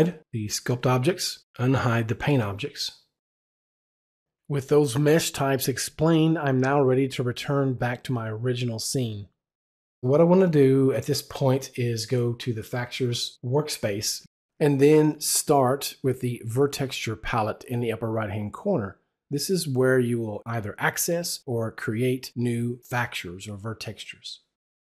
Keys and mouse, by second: 0.4 click, 1.7 click, 2.7 click, 10.8 click, 11.7 click.